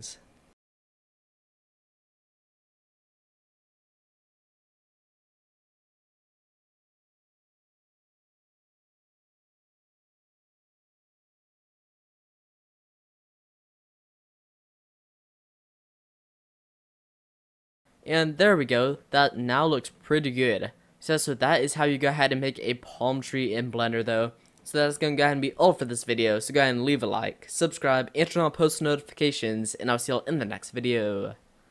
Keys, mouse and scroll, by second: 2.5 middle click, 3.1 middle click, 3.6 middle click, 4.2 click, 4.2 middle click, 6.6 middle drag, 7.0 middle click, 7.2 middle click, 7.9 middle click, 8.7 middle click, 10.4 middle click, 12.9 middle click, 13.0 middle click, 13.2-13.5 middle drag, 14.3 middle click, 14.4 middle click, 14.5 middle click, 14.6 middle click, 15.0 drag, 15.4 middle click, 15.6 scroll up 1, 15.7 scroll down 1, 15.7-16.1 scroll up 1, 17.8 click, 18.4 scroll down 1, 18.5-19.0 middle drag, 19.0-20.0 scroll down 3, 19.4 middle click, 20.0-21.5 middle drag, 21.5-22.3 scroll up 5, 22.3-22.9 middle drag, 22.9-23.4 scroll down 6, 23.4-24.2 middle drag, 24.2-24.6 scroll up 1, 24.6-31.7 middle drag.